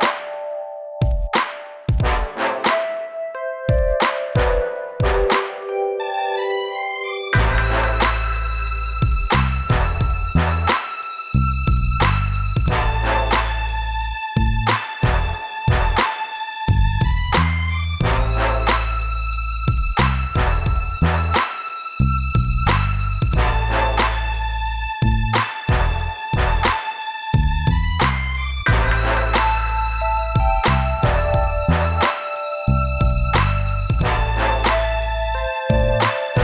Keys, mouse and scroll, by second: 0.3 click, 1.9 click, 3.3 click, 6.1 middle click, 7.0 click, 12.2 middle click, 13.9 scroll down 1, 14.2 middle click, 14.9 scroll up 2, 15.6 click, 15.7 click, 16.8 click, 21.2 scroll down 1, 22.4 click, 22.5 click, 25.1 click, 25.2 click, 25.9 scroll down 1, 26.8 scroll down 1, 27.5 click, 27.5 scroll down 1, 27.6 click, 29.3 click, 30.1 scroll up 2, 31.0 right click, 31.9 click, 33.0 scroll down 2, 34.3 click, 34.3 click, 35.8 click, 35.9 click.